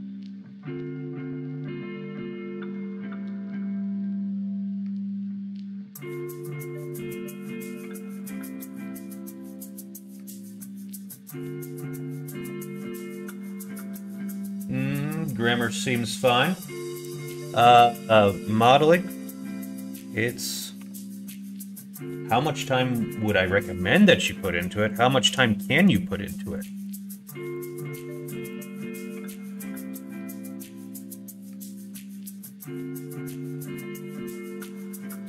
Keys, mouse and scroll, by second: 0.5 g, 17.4 middle click, 19.2 click, 19.9 click, 20.7 3, 21.1 click, 24.8 shift+click, 25.4 middle click, 27.5 shift+click, 29.0 middle click, 31.3 middle click, 31.7 shift+middle click, 32.7 middle click, 33.6 middle click, 35.0 shift+middle click.